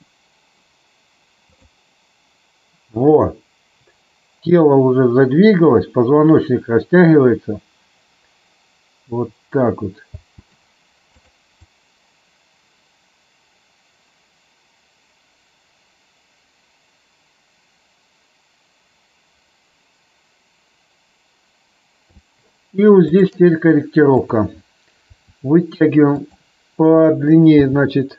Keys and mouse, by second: 10.2 space, 11.0 click, 11.6-22.2 drag, 24.0 click, 25.0 r, 26.9 click, 27.6 g.